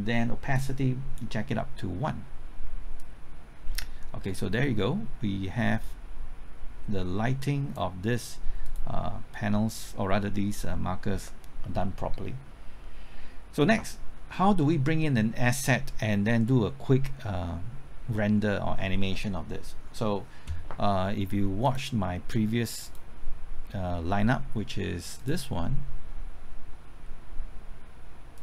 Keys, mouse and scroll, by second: 14.1-14.6 scroll up 1, 14.6 scroll down 1, 21.6 click.